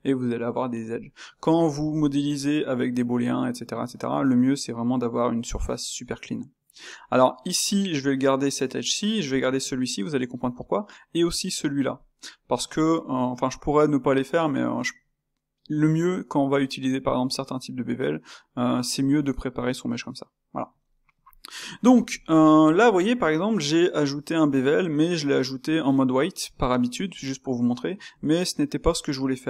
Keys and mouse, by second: 1.0-5.0 shift+middle drag, 7.0-10.0 middle drag, 10.4-15.6 middle drag, 20.8-23.6 middle drag, 23.6 Tab, 28.9 Tab.